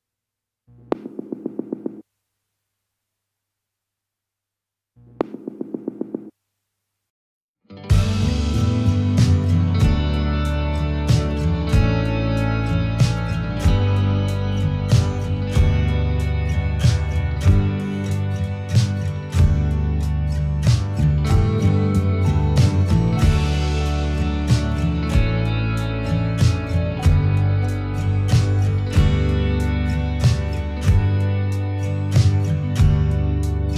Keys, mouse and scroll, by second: 0.4 click, 0.8-2.1 middle drag, 2.1-3.3 drag, 3.5-5.7 middle drag, 5.7 click, 6.7-7.9 middle drag, 8.1 click, 9.3-10.4 middle drag, 10.7 click, 11.6 click, 13.6-14.7 middle drag, 14.7 click, 16.4 middle click, 16.8 scroll up 1, 17.1 scroll down 1, 17.1-19.5 middle drag, 19.3-19.9 drag, 20.2 click, 21.2-22.4 middle drag, 22.2 click, 22.6 middle click, 22.8-24.0 drag, 24.0-25.1 middle drag, 26.3 click, 26.3 n, 26.5 n, 27.2 click, 27.2 n, 27.4 middle click, 27.9-28.9 drag, 28.9-30.5 middle drag, 30.9-32.3 drag, 32.3 middle click, 32.8 click, 33.2 middle click.